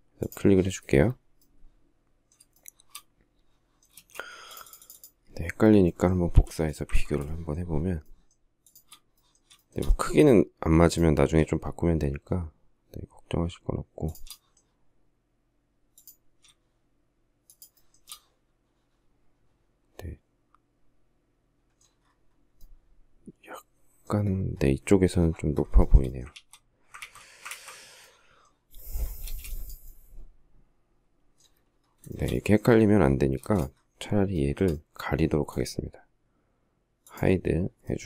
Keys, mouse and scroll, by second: 2.3 shift+middle click, 3.7 space, 6.1 m, 7.2 shift+middle click, 7.8 shift+middle click, 8.5 shift+click, 9.4 shift+middle click, 13.9 shift+click, 17.3 shift+click, 17.6 shift+middle click, 25.6 shift+middle click, 26.1 ctrl+z, 26.8 ctrl+z, 27.3 ctrl+z, 29.0 space, 31.9 shift+middle click, 33.2 space.